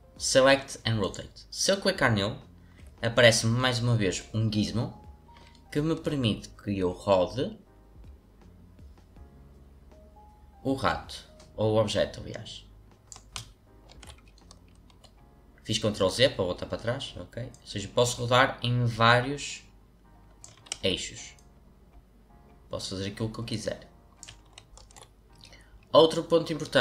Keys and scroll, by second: 13.8 ctrl+z, 20.7 ctrl+z, 24.8 ctrl+z.